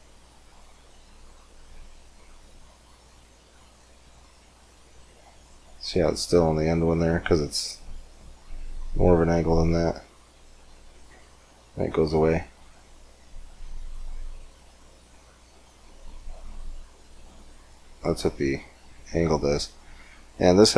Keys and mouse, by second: 5.6-7.8 middle drag, 8.8-20.2 drag, 20.2-20.7 middle drag.